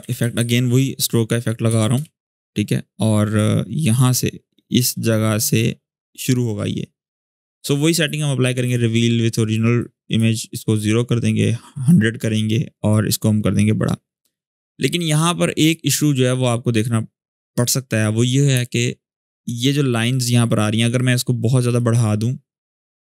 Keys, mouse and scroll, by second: 0.0-0.6 typing, 1.4 Down, 1.7 Return, 3.1-5.6 drag, 11.1-11.7 drag, 12.6-15.4 drag, 16.6-18.3 scroll up 1, 18.3 space, 18.5 click, 18.8 space, 21.5-23.1 drag.